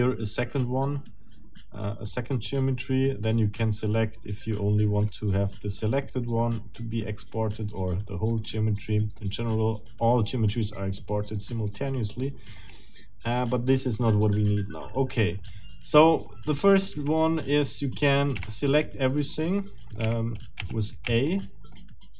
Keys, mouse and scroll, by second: 5.0 click, 8.3-9.4 middle drag, 10.7-12.8 middle drag, 14.0 middle click, 14.4 middle click, 14.8 middle click, 15.5 middle click, 16.3-17.7 middle drag, 18.4 Tab, 19.1-20.2 middle drag, 20.0 Tab, 20.6 a, 21.7 middle click.